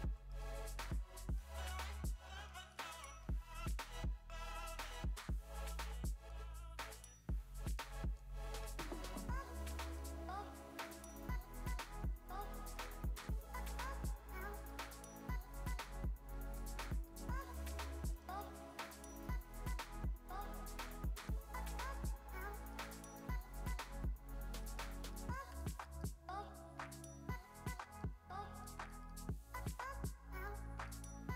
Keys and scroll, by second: 0.6 space, 2.3 space, 7.7 super+g, 8.6 shift+super+[, 11.1 super+7, 11.9 super+z, 16.5 super+7, 17.1 super+z, 20.8 shift+super+g, 23.6 super+7, 25.0 space, 25.3 v, 25.6 space.